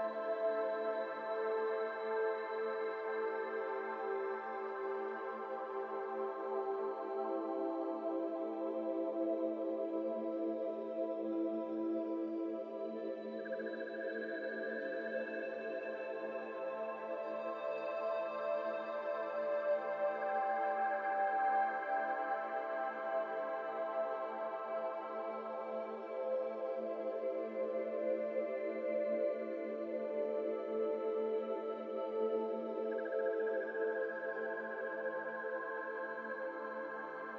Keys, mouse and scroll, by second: 0.7 Tab, 0.9 scroll down 1, 0.9-1.7 middle drag, 1.7 ctrl+1, 2.1 ctrl+2, 2.4-4.7 middle drag, 4.7 ctrl+s, 4.8-5.5 middle drag, 5.5 Tab, 6.0 click, 6.2 3, 6.4 click, 6.6 shift+middle click, 6.8 scroll up 2, 7.0 middle click, 7.8 e, 8.8 Tab, 9.0 scroll down 1, 9.1-10.1 middle drag, 10.1 ctrl+z, 10.3 ctrl+z, 10.5 Tab, 10.6 scroll down 1, 10.6-11.7 middle drag, 12.5-12.8 middle drag, 12.8-13.8 right drag, 13.8 middle click, 14.0-14.8 right drag, 14.8-15.6 middle drag, 15.6 KP_1, 16.2 Tab, 16.6-19.0 shift+middle drag, 19.0 click, 19.4-19.7 scroll up 2, 19.7 shift+middle click, 20.4 alt+z, 20.5 middle click, 21.3 shift+d, 22.1-23.3 middle drag, 23.3-23.6 scroll up 2, 23.6 g, 25.3 middle click, 25.9 f, 26.0 scroll down 2, 26.2 middle click, 27.1 e, 28.9 ctrl+z, 29.9 p, 31.0 Tab, 31.2 click, 31.5 middle drag, 31.7 Tab, 32.0 a, 32.4 Tab, 33.1 click, 34.2-34.7 drag, 34.7 middle click, 35.0 Tab, 35.2 middle click, 35.4 a, 35.7 e.